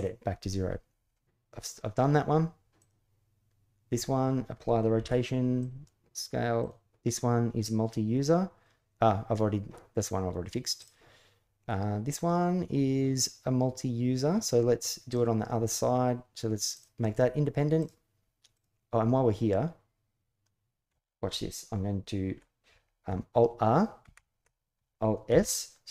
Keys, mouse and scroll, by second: 1.0 middle click, 4.8 ctrl+a, 6.3 click, 7.0-7.7 middle drag, 10.5 click, 14.9 click, 16.5 click, 17.6 click, 23.8 alt+r, 25.1 alt+s.